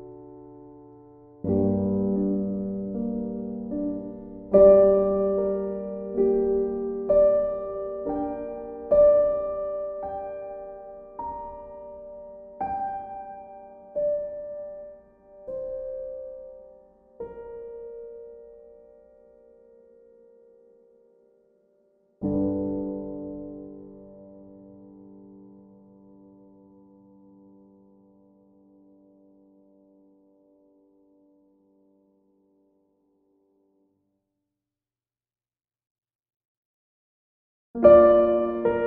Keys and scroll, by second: 13.6 e, 21.1 b, 28.3 e.